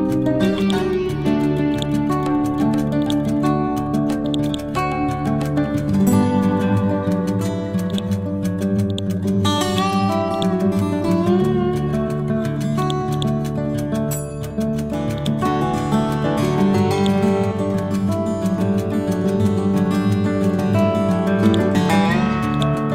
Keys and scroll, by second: 5.6 F12, 6.3 2, 6.5 Return, 12.1 Down.